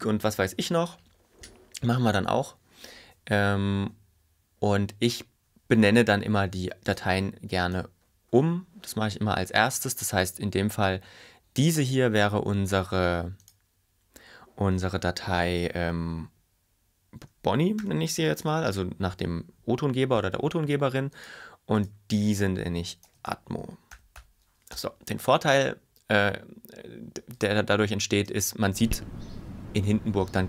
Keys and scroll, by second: 17.7-19.7 typing, 20.3 Return, 22.9-24.8 typing, 24.8 Return, 28.3 space.